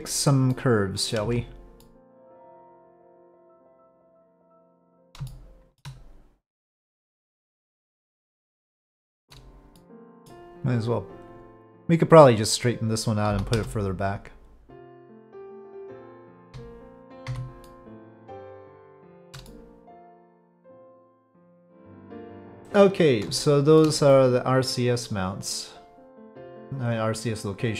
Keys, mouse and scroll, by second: 0.5-1.1 middle drag, 1.2 Tab, 1.9 middle click, 2.1 click, 2.3 2, 2.8-4.1 drag, 4.4 middle click, 5.3 shift+middle click, 6.8-8.7 drag, 9.2 middle click, 9.3 z, 9.7-10.3 middle drag, 12.8 click, 14.7-16.0 drag, 16.4 z, 17.7-18.7 middle drag, 19.0 shift+middle drag, 19.5-20.7 middle drag, 21.6-22.5 drag, 21.6-22.5 middle drag, 23.4 shift+click, 23.4 shift+middle click, 24.1-27.7 middle drag.